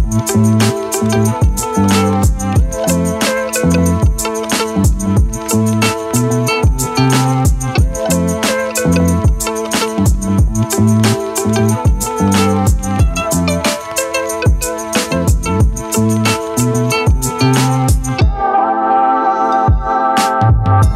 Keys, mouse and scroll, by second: 3.1 right click, 3.1 click, 5.6 click, 9.6 click.